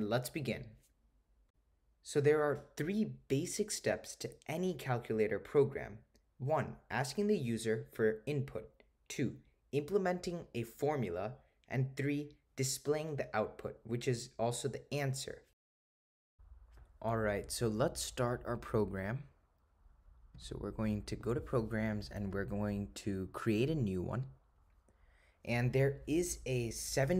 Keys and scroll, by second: 22.0 Right, 22.4 Right, 24.3 Return.